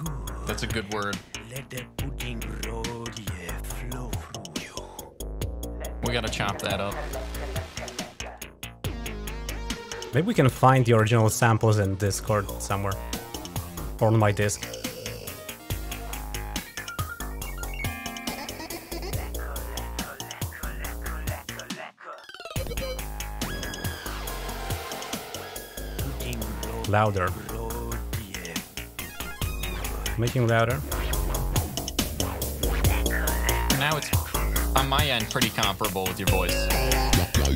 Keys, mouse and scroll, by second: 28.0-34.1 drag.